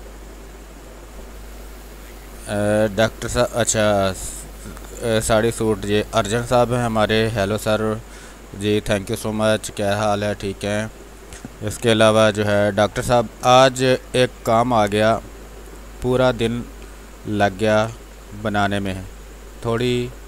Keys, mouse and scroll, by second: 1.2-2.6 drag, 9.2 space.